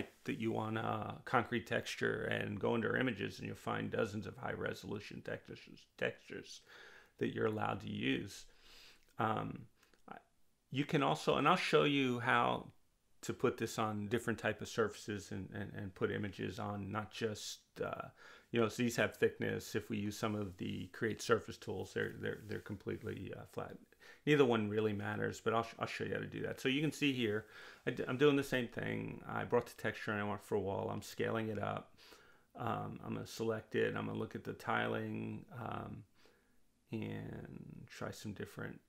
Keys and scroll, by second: 8.3 2, 9.0 5, 9.1 Return, 12.7 3, 13.0 0, 13.2 Return, 21.5 2, 22.9 Return, 37.6 3.